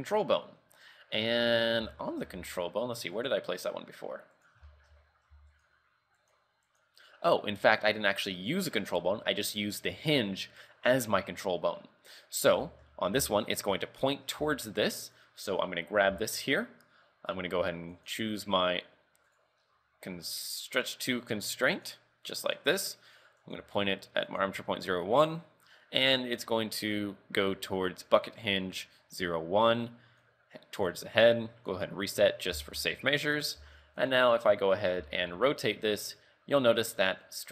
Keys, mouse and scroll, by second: 0.2 scroll up 2, 1.0-1.4 scroll down 3, 2.0 shift+middle click, 2.4 Tab, 3.3 click, 3.6 scroll up 3, 4.5 right click, 4.8 shift+middle click, 5.4 z, 5.6 right click, 6.4 right click, 6.8 right click, 7.9 click, 8.2 click, 12.2 click, 12.7 shift+middle click, 13.1 scroll up 2, 13.3 z, 13.7 right click, 14.6 shift+middle click, 15.2 right click, 16.2 z, 16.5 scroll down 3, 18.0 click, 19.5 right click, 20.7 right click, 21.0 right click, 21.8 click, 23.5 click, 25.3 click, 30.3 click, 31.8 click, 32.4 scroll up 3, 32.6 z, 32.9 shift+middle click, 33.4 scroll down 5, 33.7 z, 34.2 right click, 34.5 scroll up 2, 35.1 r.